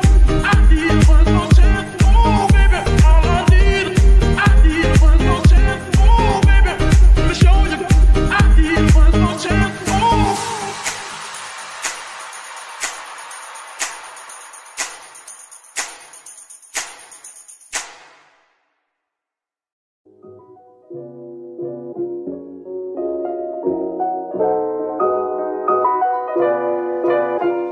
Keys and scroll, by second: 0.7 KP_0, 0.7 KP_Decimal, 0.9 KP_3, 2.0 Return, 3.5 g, 3.6 y, 8.8 Escape, 11.8 KP_1, 11.8 KP_5, 12.1 Return, 13.5 g, 13.7 y, 17.3 Escape, 18.2 r, 22.2 Escape, 25.2 z.